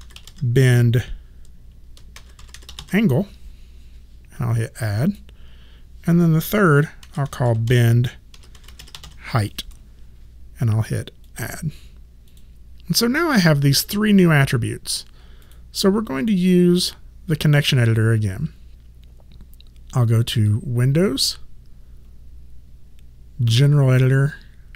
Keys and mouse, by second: 0.0-0.7 typing, 1.9-3.3 typing, 5.0 click, 6.8-9.5 typing, 11.2 click, 15.4 click, 20.5 click.